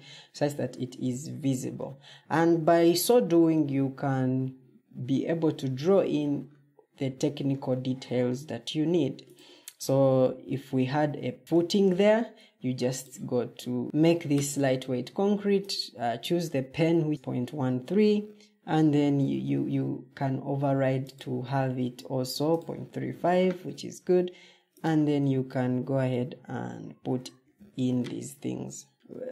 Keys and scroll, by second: 0.3 Escape, 13.8 Escape, 27.1 shift+Tab, 28.9 Escape.